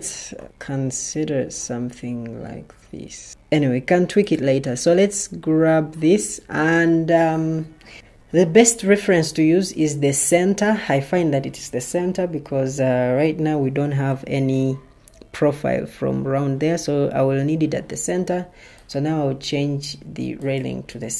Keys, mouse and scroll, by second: 0.2 Escape.